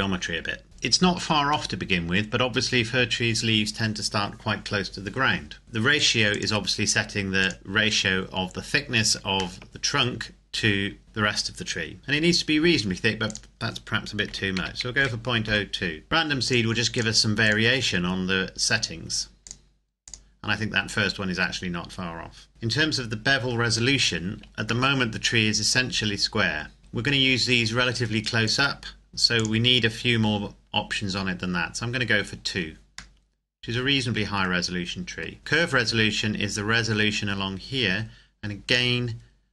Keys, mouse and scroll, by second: 0.8-1.7 scroll up 1, 1.7 middle click, 2.3-2.7 scroll down 1, 5.6 click, 9.5 shift+middle click, 13.2 click, 14.2 KP_Decimal, 14.5 KP_0, 14.9 KP_2, 15.4 KP_Enter, 16.4 click, 24.8 middle click, 26.0-26.8 scroll up 1, 28.4 click, 33.1 middle click, 38.6 click.